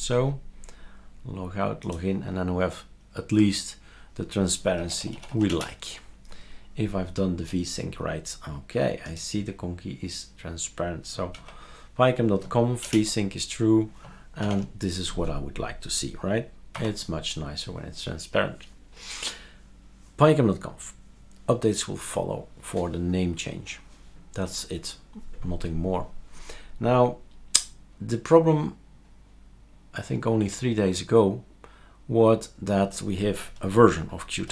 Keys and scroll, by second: 0.1 super+x.